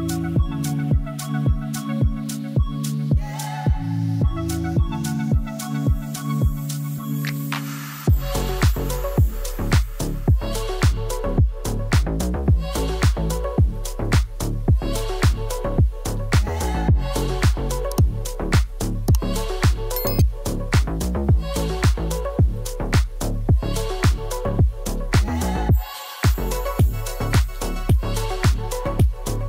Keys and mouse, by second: 3.6 ctrl+s, 4.0 middle click, 4.5-7.0 drag, 7.9 ctrl+s, 8.9 KP_0, 10.0 shift+middle drag, 11.3 h, 12.6 alt+h, 13.5 ctrl+s, 13.9 click, 15.0 click, 16.4 shift+middle click, 16.8 ctrl+s, 17.3-17.8 shift+middle drag, 20.2-22.5 drag, 22.1 0, 23.6 click, 23.8 click, 26.0 ctrl+s, 28.8-29.4 drag.